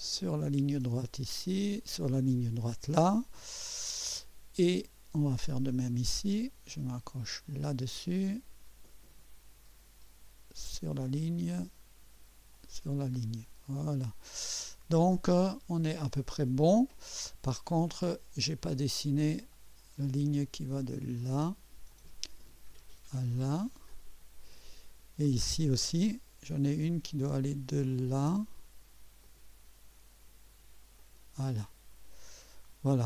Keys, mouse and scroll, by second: 0.4 click, 2.2 click, 3.7 right click, 5.5 right click, 7.5 click, 10.7 click, 12.5 click, 13.2 scroll up 2, 13.6 right click, 14.5 right click, 19.5 click, 21.9 click, 23.9 click, 24.7-25.1 scroll up 1, 25.3 right click, 29.2 click, 31.0 click, 31.8-32.6 scroll down 2.